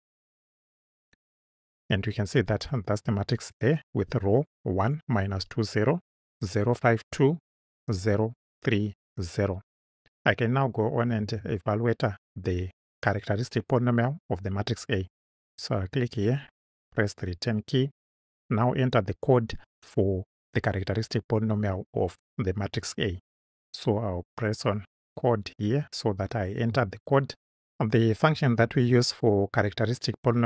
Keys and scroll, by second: 16.8 Return.